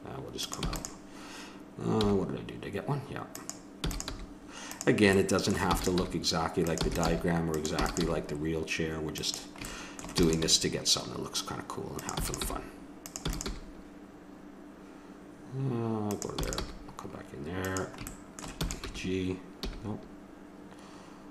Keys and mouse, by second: 0.6 e, 2.0 g, 3.7 e, 4.1 g, 5.6-8.0 typing, 10.1 e, 10.6 g, 12.2 e, 12.4 g, 13.2 e, 13.5 g, 16.4 e, 16.6 g, 18.8-20.4 drag.